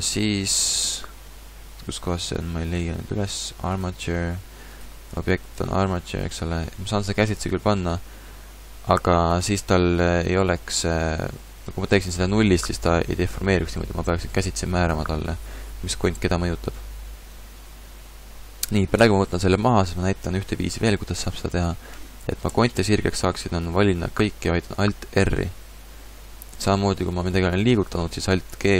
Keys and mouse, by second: 22.5 a, 22.8 a, 25.4 alt+r, 27.3 g.